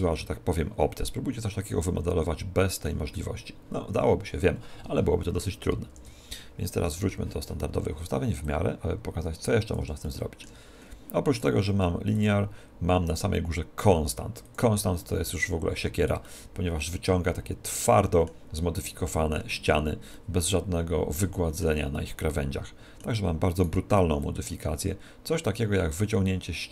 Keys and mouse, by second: 5.9 alt+r, 6.8 KP_1, 8.5 click, 10.1-11.8 middle drag, 11.4 right click, 12.2 click, 16.3-23.6 middle drag, 23.6 right click, 24.3 click.